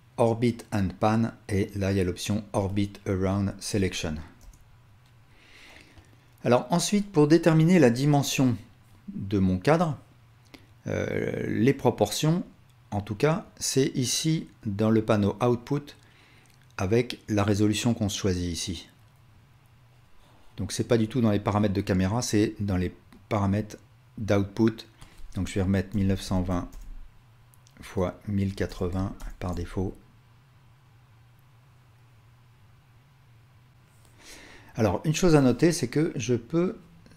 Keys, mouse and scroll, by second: 4.4 KP_0, 13.4 click, 16.4-20.6 drag, 21.6-22.6 drag, 35.5-36.5 drag.